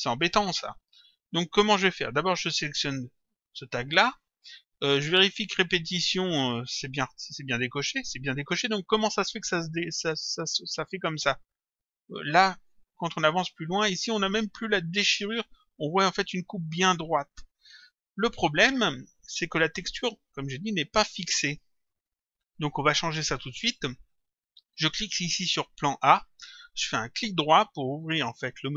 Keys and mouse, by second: 2.5 click, 10.8 click, 14.3 click, 18.5 click, 19.8 click, 22.7 click, 24.8 click, 28.4 right click.